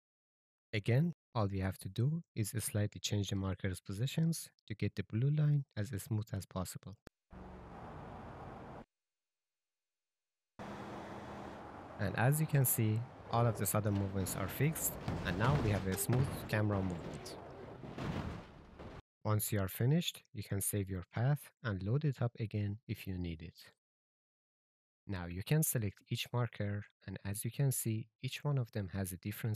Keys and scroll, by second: 4.8 s, 5.5 shift+w, 11.1 j, 13.6 Left, 19.0 j, 21.9-24.7 typing.